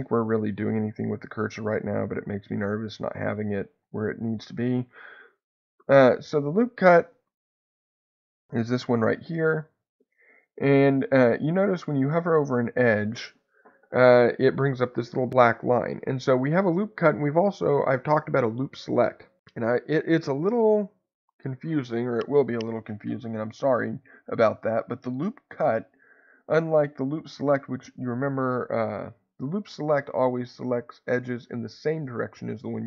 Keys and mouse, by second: 0.2-2.1 middle drag, 4.7 shift+middle click.